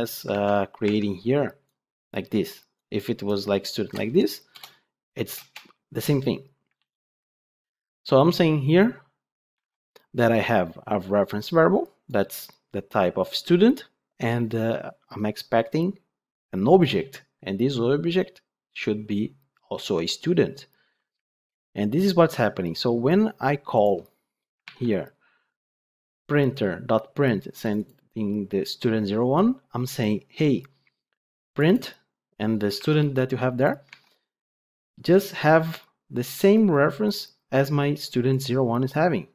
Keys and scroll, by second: 0.8 ctrl+Tab, 6.7 ctrl+z, 9.5 ctrl+Tab, 24.5 ctrl+Tab, 32.7 ctrl+Tab.